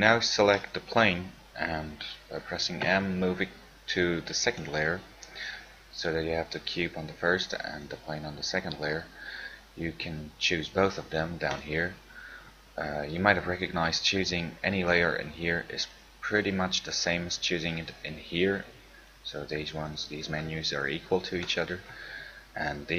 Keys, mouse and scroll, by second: 3.0 m, 8.0 click, 15.2 click.